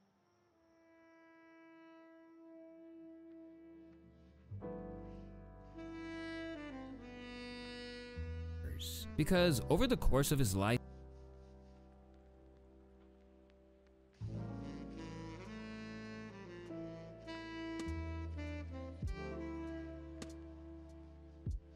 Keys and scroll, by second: 0.4 alt+e, 0.9 alt+g, 2.6 v, 10.4 space, 12.8 ctrl+s, 13.1 ctrl+a, 15.4 F2, 16.8 u.